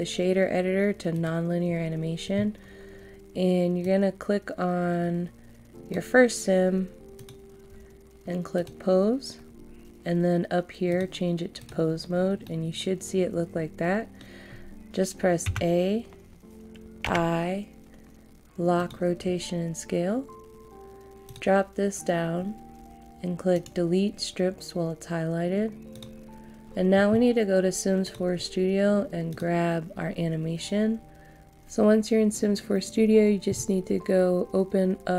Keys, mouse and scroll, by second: 11.8 click, 12.4 middle click, 15.5 a, 17.0 i, 18.7 click, 23.5 right click, 25.9 click, 31.4 click.